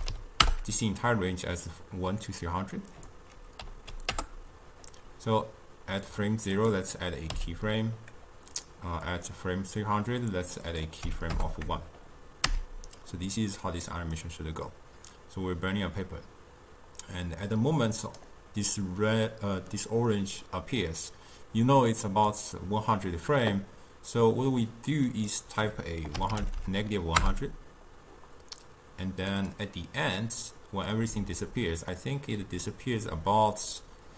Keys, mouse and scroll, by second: 0.2 0, 3.0-6.7 drag, 9.2-12.6 drag, 14.3-18.3 drag, 21.9-26.6 drag, 26.6 0, 29.4-34.1 drag.